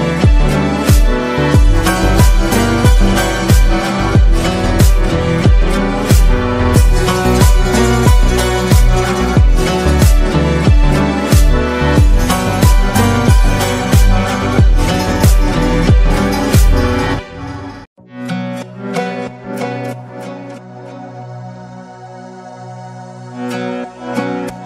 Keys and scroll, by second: 2.5 ctrl++, 2.7 ctrl++.